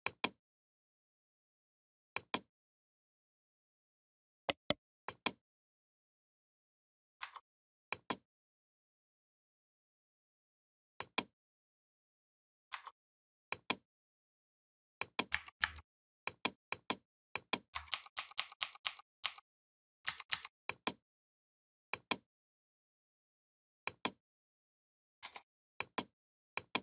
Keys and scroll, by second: 15.1 4, 15.4 5, 17.7 ctrl+d, 19.8 v.